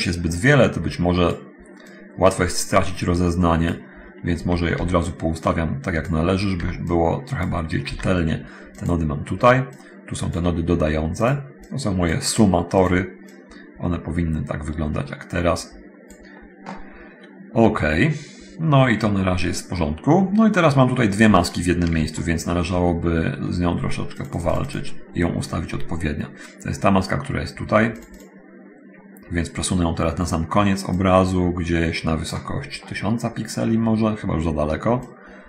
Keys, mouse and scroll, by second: 0.6-1.7 drag, 2.1-3.6 drag, 4.6 a, 5.0 b, 5.2-6.4 drag, 6.7-7.8 drag, 6.7 b, 8.1 g, 9.0 click, 9.7 click, 11.3 click, 11.9 click, 12.8 click, 13.6-16.5 drag, 15.9-16.5 scroll up 1, 20.0 middle click, 24.4 click, 28.0 click, 30.8-32.3 drag, 35.2 click.